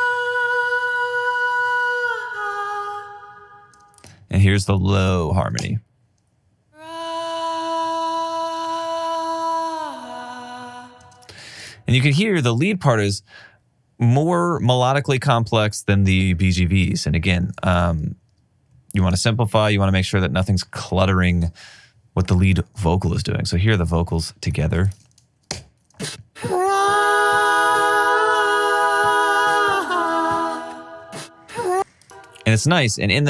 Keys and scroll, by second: 4.2 space, 5.9 space, 25.9 alt+shift+space.